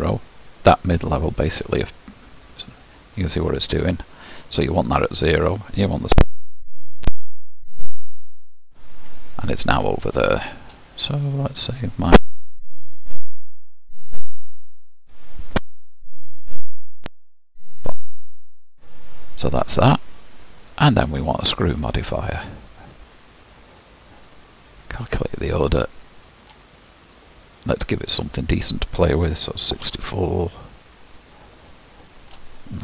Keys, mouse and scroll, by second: 7.6 click, 8.5-9.4 scroll down 10, 9.4-10.3 scroll up 1, 10.3-13.7 shift+middle drag, 13.7-20.6 drag, 22.4-25.1 drag, 25.8-26.9 middle drag, 26.9-29.6 scroll up 4, 29.6-30.0 scroll up 1, 30.0-31.8 drag, 31.8 shift+middle click, 32.4-32.8 shift+scroll down 1.